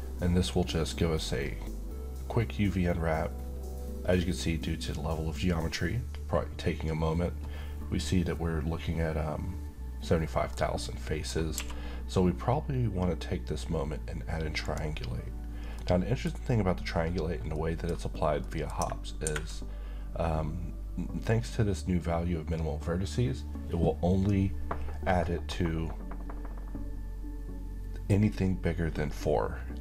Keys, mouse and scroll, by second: 10.5-11.5 middle click, 11.5 q, 14.6 click, 15.7-16.4 middle click, 16.3 scroll up 1, 17.5-18.2 middle click.